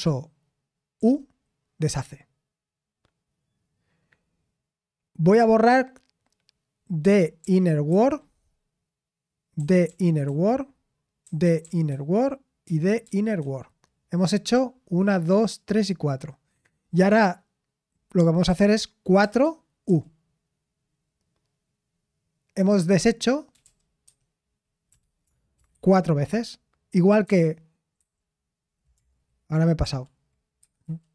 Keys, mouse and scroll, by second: 9.8-13.9 typing, 29.5-31.1 typing.